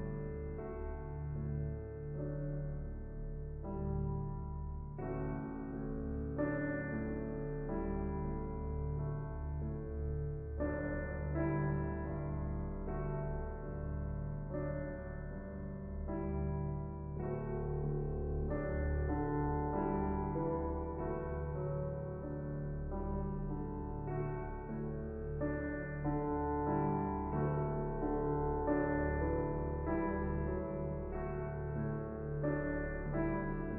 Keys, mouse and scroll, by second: 0.3 click, 1.0 shift+middle click, 1.5 scroll up 1, 3.2-6.6 drag, 10.8 ctrl+shift+t, 15.6-16.9 drag, 16.9-19.3 middle drag, 19.3 click, 20.0 x, 21.5 click, 22.2 click, 23.8 click, 28.6 ctrl+v.